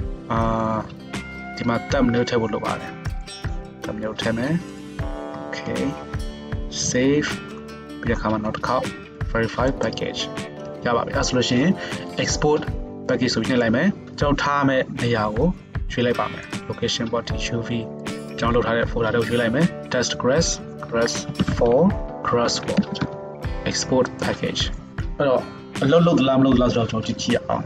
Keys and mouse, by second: 6.8 ctrl+s, 17.6-24.5 middle drag, 24.9-27.5 middle drag, 27.6 middle click.